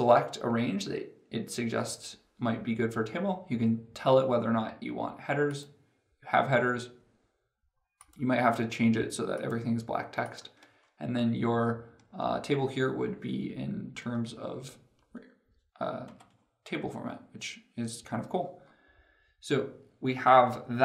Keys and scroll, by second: 15.8 ctrl+Home.